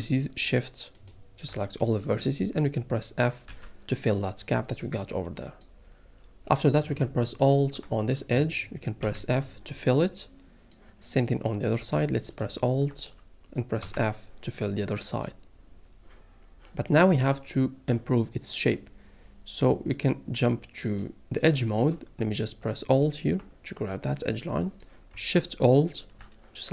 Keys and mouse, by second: 0.4 shift+click, 1.8 click, 3.5 f, 7.4 alt+click, 9.0 f, 13.8 f, 20.9 click, 25.7 alt+shift+click.